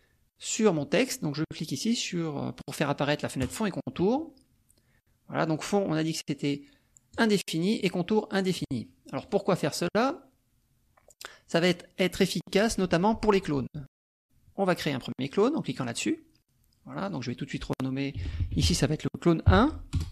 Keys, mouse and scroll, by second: 3.4 click, 5.4 click, 7.2 click, 7.8 click, 8.4 click, 9.2 click, 10.0 click, 15.7 click, 17.1 click, 18.3 l, 18.5 n, 19.4 KP_1, 20.0 Return.